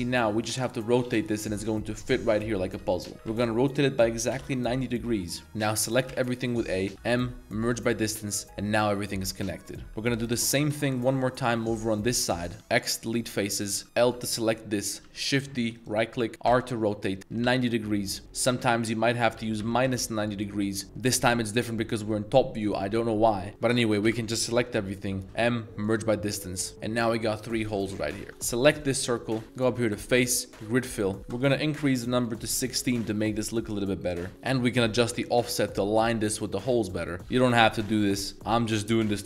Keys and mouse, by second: 3.2 z, 4.3 9, 4.7-5.1 drag, 4.7 0, 5.1-5.5 middle drag, 6.1 a, 6.9 m, 8.4 Tab, 8.8-9.3 middle drag, 9.3 Tab, 9.5 middle click, 9.8 2, 10.1 alt+click, 10.4 shift+middle drag, 10.8 z, 11.4 3, 11.6 click, 12.6 x, 13.2 shift+click, 13.5 3, 13.8 a, 14.0 l, 15.0 shift+d, 16.4 r, 17.3 9, 17.4 0, 18.0 right click, 18.4 r, 19.3 -, 19.6 9, 19.8 0, 20.2 click, 23.5 shift+middle click, 24.0 a, 25.2 m, 26.6 Tab, 26.7-27.4 middle drag, 27.6 Tab, 28.0 1, 28.8 shift+middle drag, 28.8 shift+s, 29.6-30.6 drag, 31.4 click, 34.3-36.8 drag, 37.0-39.2 middle drag.